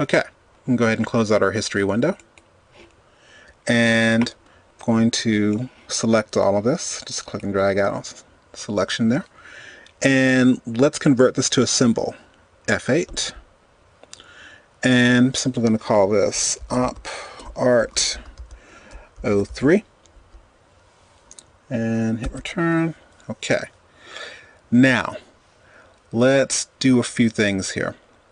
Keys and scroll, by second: 13.3 F8, 22.0 Return.